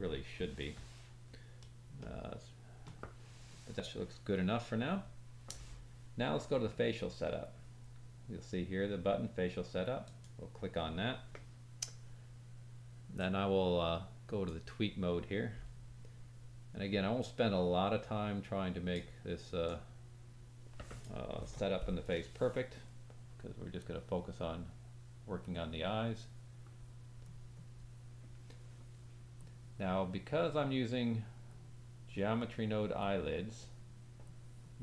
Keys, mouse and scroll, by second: 1.9 shift+click, 1.9 shift+middle click, 2.7 shift+click, 3.2-5.6 scroll up 2, 6.4-8.2 scroll down 7, 10.0 click, 13.2 click, 17.2 click, 19.7 click, 23.8 click, 25.5 click, 27.3 click, 29.4-34.8 drag.